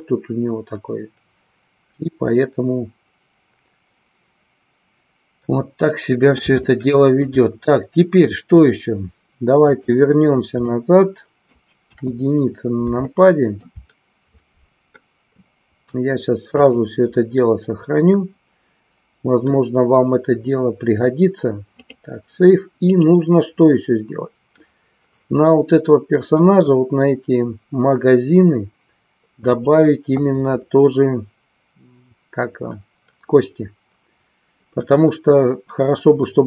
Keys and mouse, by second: 6.8 shift+middle click, 9.6 click, 10.8 middle click, 11.9 KP_1, 13.2 shift+middle click, 16.6-22.0 drag, 29.4 click.